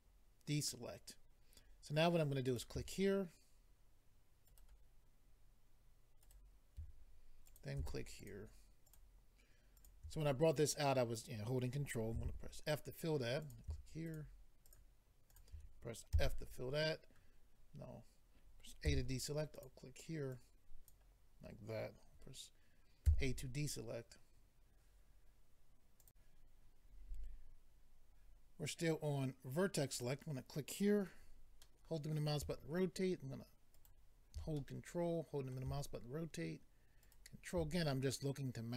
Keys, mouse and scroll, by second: 2.5 click, 4.5 ctrl+right click, 6.2 ctrl+right click, 7.4 click, 8.2 shift+click, 8.9 shift+click, 9.7 shift+click, 13.4 click, 14.1 shift+click, 14.6 shift+click, 15.3 shift+click, 16.1 f, 18.8 a, 19.5 click, 20.3 click, 23.0 a, 26.0 click, 29.9 click, 31.6 middle click, 33.7 ctrl+right click, 34.6 middle click, 38.3 ctrl+right click.